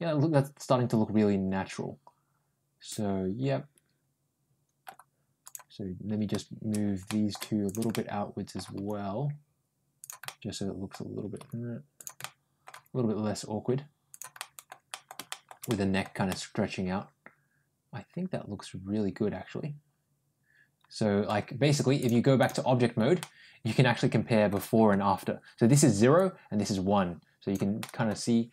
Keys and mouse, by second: 5.3 click, 6.9 middle click, 7.5 shift+click, 7.8 middle click, 8.6 g, 10.1 middle click, 11.2 g, 12.0 middle click, 12.6 g, 14.2 middle click, 14.7 middle click, 15.1 middle click, 15.5 middle click, 16.1-20.7 middle drag, 20.7 middle click, 22.0 click, 23.0-24.3 middle drag, 26.1-27.3 drag, 27.6 middle click.